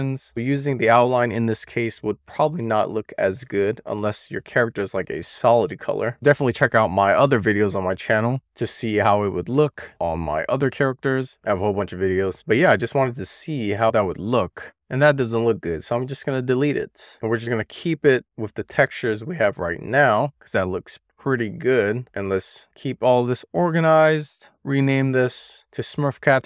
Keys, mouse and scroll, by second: 15.8 click, 16.4 x.